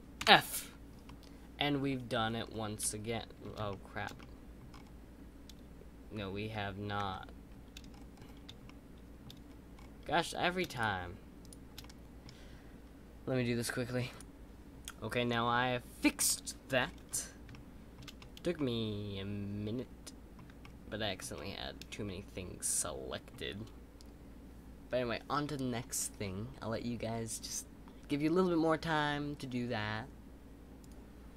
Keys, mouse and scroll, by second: 1.0-2.1 middle drag, 2.1-2.8 scroll down 4, 2.8-4.7 middle drag, 4.7-6.4 scroll up 5, 6.4 ctrl+z, 7.9-8.6 scroll down 6, 8.6 shift+middle click, 9.4-10.7 scroll up 4, 10.7 shift+click, 11.8-15.0 middle drag, 16.7-17.5 scroll up 6, 17.5-24.5 middle drag.